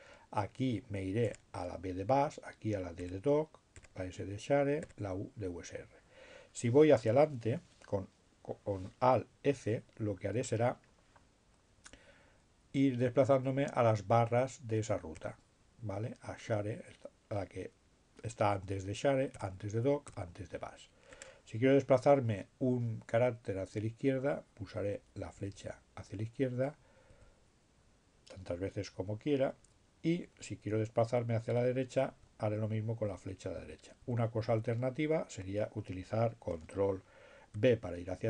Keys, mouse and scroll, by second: 3.1 b, 3.5 b, 3.9 b, 12.4 f, 16.7 f, 20.3 f, 24.7 Left, 25.3 Left, 29.6 Right, 33.1 Right, 33.9 Right, 37.8 ctrl+b.